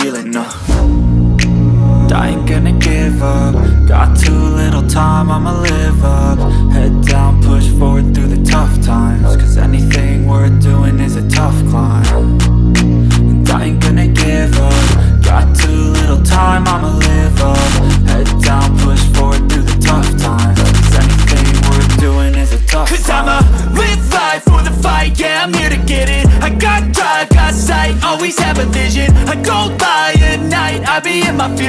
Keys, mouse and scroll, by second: 2.0 click, 3.0 click, 3.3-4.5 right drag, 4.5 click, 4.8-5.1 scroll down 5, 5.1-6.2 middle drag, 6.2 click, 6.4-6.8 scroll up 1, 6.8-7.6 shift+middle drag, 7.6 KP_1, 8.3 click, 8.6-9.0 scroll up 1, 9.0-10.0 shift+middle drag, 10.0 shift+a, 12.6 g, 14.4 r, 16.1-18.0 drag, 18.2 click, 18.9 click, 19.5 s, 22.0 g, 26.4 click, 26.9 click, 28.9 click, 29.5 click.